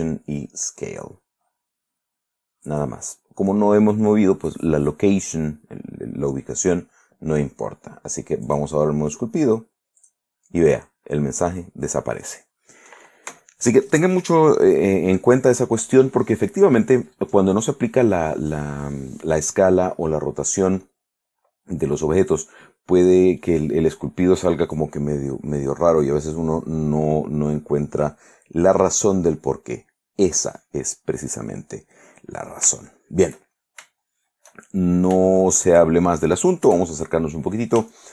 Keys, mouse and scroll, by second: 2.8 click, 8.6 click, 10.2 click, 29.0 click, 29.9 click, 31.7 middle click, 33.0-34.1 shift+middle drag, 34.2-35.2 shift+middle drag, 35.4 shift+middle click, 36.8 KP_Add, 37.5-38.1 middle drag.